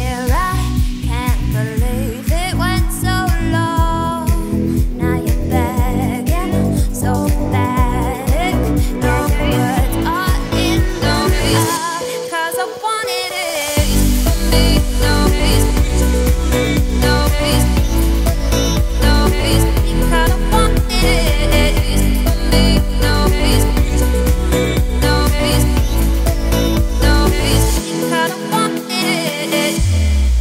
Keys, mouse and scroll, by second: 0.6 shift+click, 1.1 Tab, 1.4 a, 1.9 s, 3.4 scroll down 4, 3.5 middle click, 4.3 scroll up 3, 4.5 Tab, 4.9-5.3 scroll up 2, 5.3 Tab, 6.0 a, 6.3 scroll down 2, 6.6 shift+middle click, 7.1 shift+d, 10.2 scroll up 2, 10.6 s, 14.2 g, 16.9 scroll down 2, 17.0 middle click, 17.5 Tab, 17.9-19.3 scroll up 2, 19.3-20.7 middle drag, 20.7 Tab, 21.8 Tab, 22.2 click, 22.6-23.0 shift+middle drag, 23.0 Tab, 23.4 a, 24.8 s, 28.8 middle click, 29.6-30.2 scroll up 2, 30.2-30.4 middle drag.